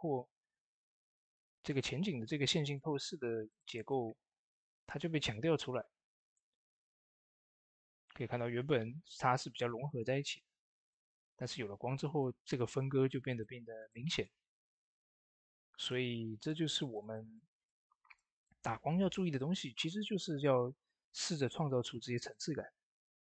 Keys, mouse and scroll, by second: 4.6-6.0 scroll up 1, 6.0 click, 15.3-15.6 scroll up 1, 15.6 click, 17.8 d, 18.0 x, 18.6 shift+F5, 20.0 ctrl+d, 20.6 click.